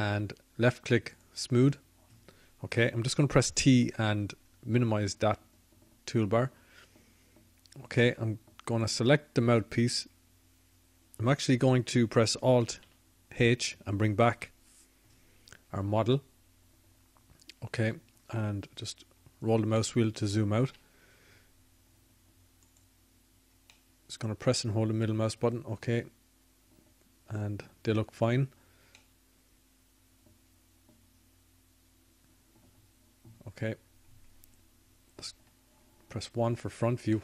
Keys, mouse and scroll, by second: 6.9-8.8 drag, 8.8 t, 13.2-15.7 drag, 18.6 alt+h, 24.4 middle click, 28.5-30.5 middle drag, 34.2 middle click.